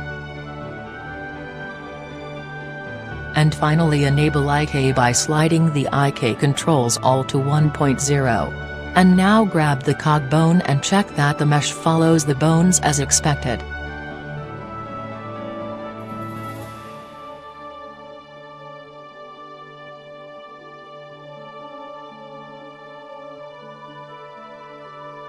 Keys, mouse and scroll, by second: 5.8-7.3 drag, 7.7-9.2 drag, 9.7-11.4 drag, 11.4-12.9 middle drag, 13.4-14.6 right drag, 14.4 g, 17.3-18.3 drag, 18.1 g, 20.1-21.1 drag, 20.8-22.1 right drag, 21.3 click, 21.5 r, 23.3-25.2 drag, 23.8 g, 24.8-25.2 right drag.